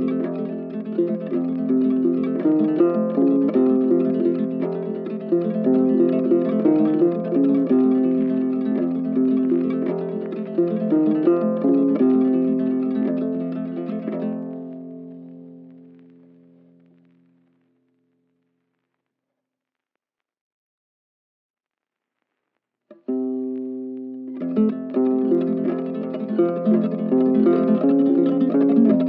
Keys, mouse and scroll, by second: 1.3 shift+click, 1.8 shift+click, 3.8 right click, 5.3 double click, 6.8 right click, 8.9 double click, 10.0 right click, 11.9 ctrl+z.